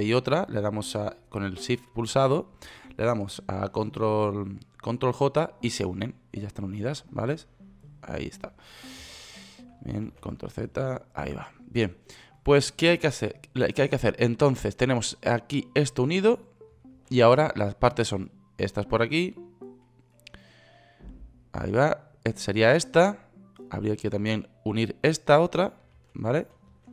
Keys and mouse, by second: 4.1 ctrl+j, 9.5 ctrl+z, 10.5 ctrl+z, 11.1 ctrl+z, 15.7-16.5 right drag, 16.5-17.4 middle drag, 17.4 ctrl+z, 26.4 ctrl+z, 26.8 ctrl+z.